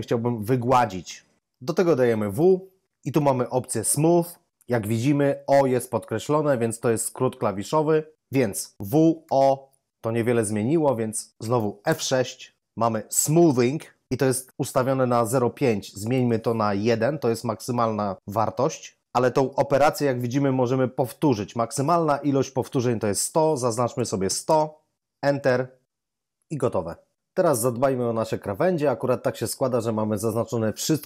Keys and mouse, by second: 2.3 w, 8.8 w, 9.2 o, 11.8 F6, 16.9 ctrl+click, 16.9 typing, 22.9 ctrl+click, 23.9-24.5 typing, 25.8 F6.